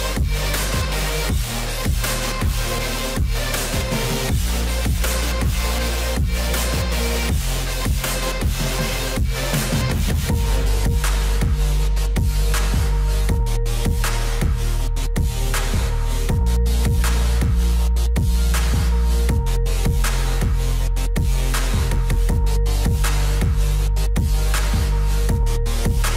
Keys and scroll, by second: 0.9 alt+w, 16.8 F4.